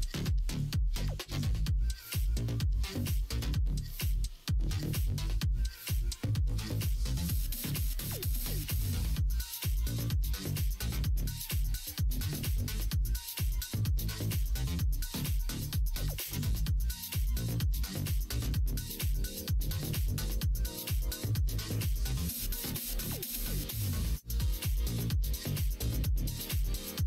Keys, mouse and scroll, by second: 0.8 s, 2.2 alt+z, 3.6 s, 9.6-11.2 middle drag, 11.2 scroll down 1, 11.5 scroll up 1, 11.6 middle click, 12.0 scroll down 1, 12.3 middle click, 12.4 right click, 12.6 ctrl+z, 12.8 ctrl+z, 13.1 ctrl+z, 13.4 ctrl+z, 15.0 KP_1, 15.2 KP_3, 16.4 e, 20.3 s, 22.1 ctrl+z, 23.8 s, 26.9 r.